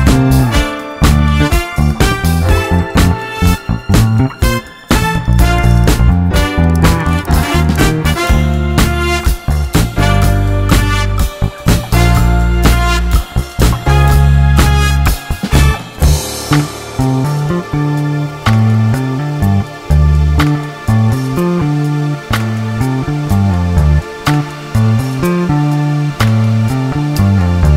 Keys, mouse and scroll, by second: 1.4-4.3 drag, 5.5-8.6 drag, 9.8-13.5 drag, 14.5-14.9 scroll down 4, 14.9-15.7 shift+middle drag, 15.7 KP_0, 16.8-17.9 drag, 17.9 shift+space, 19.6 shift+space, 20.5 shift+Left, 20.9 shift+space, 22.8 shift+space, 24.8 middle click, 24.8-25.5 scroll up 1, 25.5-25.9 shift+middle drag, 25.9 scroll down 1, 26.1-27.7 shift+middle drag.